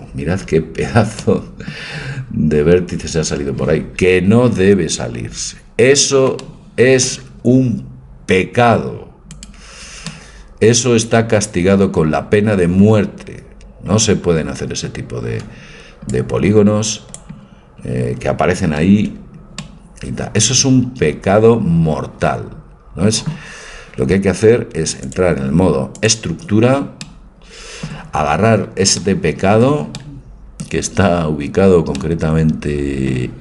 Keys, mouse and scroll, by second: 4.7 Tab, 5.6 middle click, 5.9 middle click, 6.4 middle click, 6.8 middle click, 9.4-10.7 middle drag, 10.8 middle click, 11.3 middle click, 16.2-17.2 drag, 18.2 click, 18.9 ctrl+z, 21.3 middle click, 25.1 click, 26.9 click, 27.1-29.2 middle drag, 30.3-32.0 middle drag, 32.7 middle click, 32.9 middle click, 33.1 middle click.